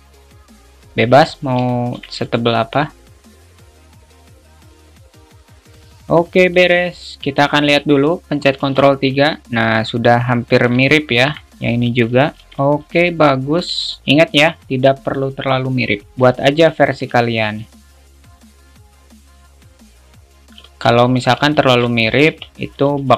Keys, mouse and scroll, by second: 1.9 alt+shift+middle click, 3.4-3.9 drag, 4.3 click, 5.3 middle click, 5.9-7.0 alt+middle drag, 7.6 alt+shift+middle click, 9.0 ctrl+3, 9.6-10.9 alt+middle drag, 11.2 alt+shift+middle click, 12.5 ctrl+3, 12.9-14.1 alt+middle drag, 16.3 alt+shift+middle drag, 17.4 shift+middle click, 18.8 right click, 19.6 click, 21.3 alt+middle click, 21.8 alt+shift+middle click.